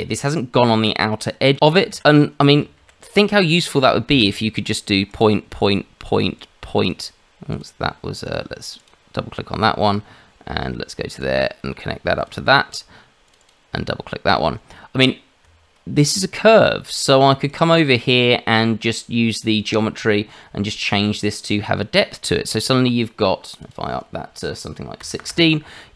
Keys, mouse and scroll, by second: 0.2-1.3 scroll down 1, 1.5 ctrl+z, 2.8 shift+z, 3.9 shift+middle click, 4.6 click, 5.1 click, 6.4 click, 7.5 click, 8.6 click, 8.8 click, 12.2 click, 13.2 click, 15.4 Tab, 17.5 click, 19.7 click, 20.2-21.5 scroll down 5, 21.5 click, 23.6 click.